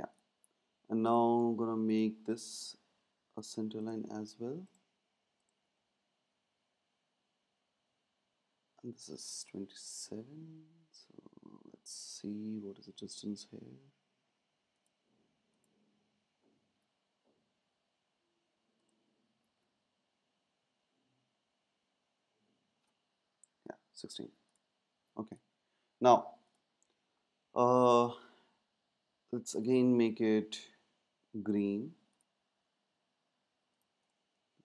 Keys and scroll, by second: 9.6 Up, 9.7 Up, 11.0 Down, 11.0 Down, 16.7 super+x, 19.7 super+v, 23.3 Down, 24.9 Down.